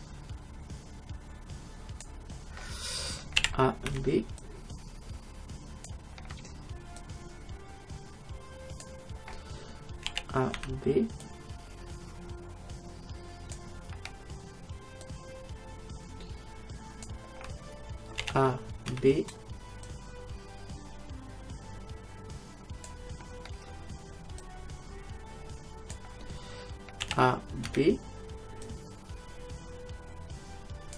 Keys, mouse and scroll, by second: 3.4 a, 3.9 b, 7.0-8.9 drag, 10.1 a, 10.6 b, 15.1-17.1 drag, 18.2 a, 18.9 b, 24.4-26.2 drag, 27.1 a, 27.7 b.